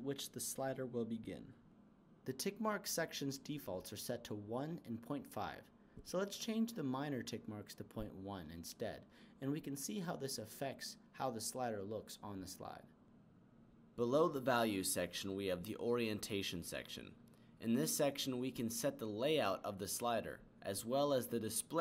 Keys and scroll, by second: 0.3 0, 6.9 BackSpace, 7.2 1.